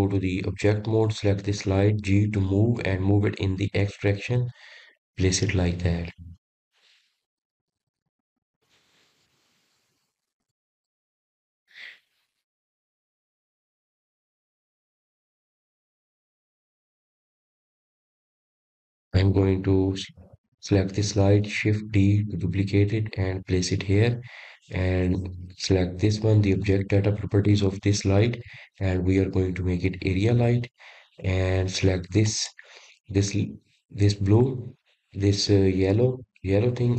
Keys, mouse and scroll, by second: 1.0 click, 2.3 Tab, 3.1-4.1 middle drag, 4.1 click, 5.9 g, 8.7-9.8 middle drag, 9.8 click, 10.2-10.7 scroll up 5, 11.2-11.8 scroll up 1, 11.9-13.5 middle drag, 13.5 scroll up 1, 13.8 scroll down 1, 14.8 click, 15.4 scroll down 2, 17.2 click, 18.1 g, 19.9 click, 20.4-21.9 middle drag, 21.9 click, 25.2 shift+d, 29.8 click, 33.1 click, 35.5 click, 36.7 click.